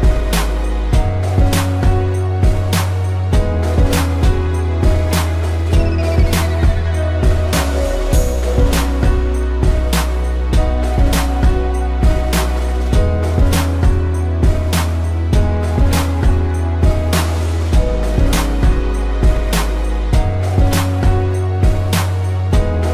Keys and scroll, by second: 1.7 ctrl+z, 9.3 a, 9.7 space, 10.4 ctrl+-, 10.7 space, 11.4 p, 14.2 ctrl+-, 14.6 space, 15.5 ctrl+=, 20.4 space.